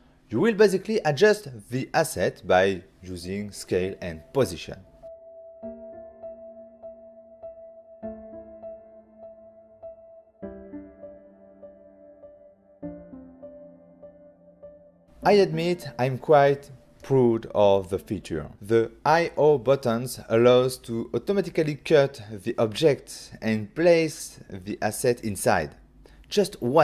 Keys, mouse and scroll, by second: 3.7 click, 8.5 click, 9.4 click, 14.8 click, 16.0 click.